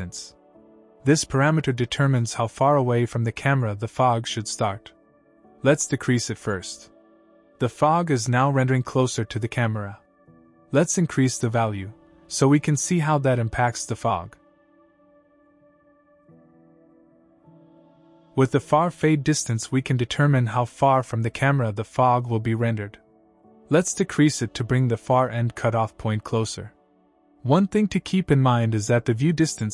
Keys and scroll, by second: 16.9 typing.